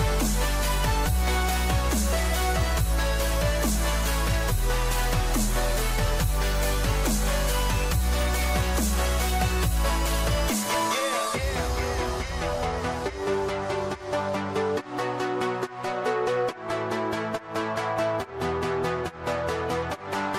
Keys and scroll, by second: 3.8 ctrl+shift+a, 19.5 ctrl+=.